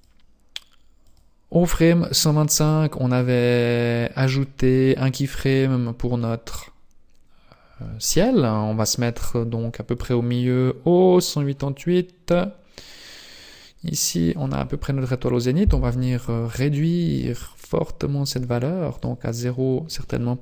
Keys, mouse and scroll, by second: 0.0 click, 1.2 click, 3.8 click, 10.1 click, 17.7 click, 18.9 click.